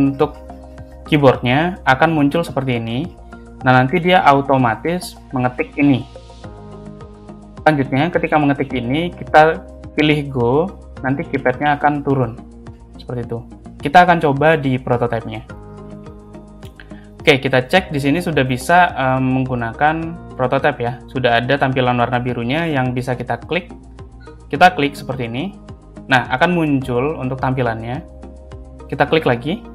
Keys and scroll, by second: 3.9 space, 8.7 space.